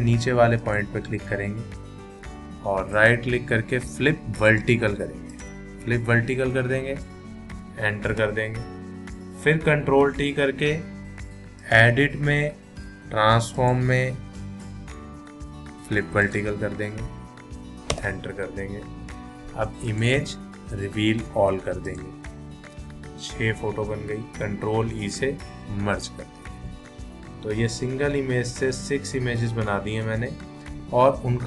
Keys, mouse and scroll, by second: 0.6 click, 2.9 right click, 5.3 click, 8.1 Return, 9.9 ctrl+t, 11.6 click, 16.2 click, 17.9 Return, 19.9 click, 24.9 ctrl+e, 27.7 ctrl+-, 29.6 ctrl+=.